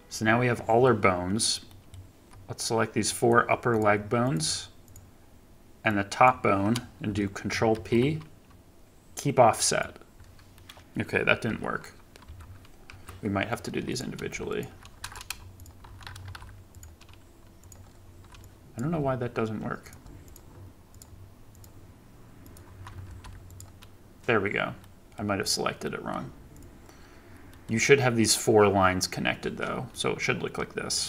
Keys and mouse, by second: 0.8 middle click, 1.6 click, 1.8-5.9 shift+middle drag, 5.9 shift+click, 6.2-10.5 shift+middle drag, 7.6 ctrl+p, 10.5 click, 11.4 g, 13.8 click, 16.2 ctrl+p, 17.5 click, 18.4 click, 19.7 click, 20.8 shift+click, 21.4 shift+click, 23.0 ctrl+p, 24.7 click, 25.7 click, 27.4 click, 29.8-31.0 drag.